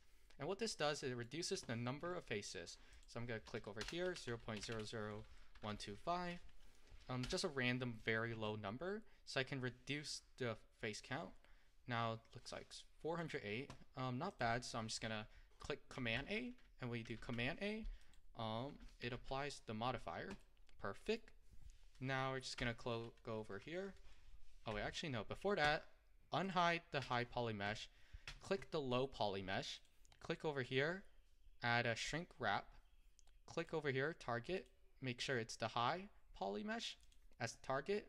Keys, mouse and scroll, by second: 0.0 click, 0.7-10.0 middle drag, 11.1-18.7 middle drag, 18.7 a, 18.7 click, 20.5-22.6 middle drag, 22.6 Tab, 24.8 Tab, 26.5 click, 32.1-37.2 drag.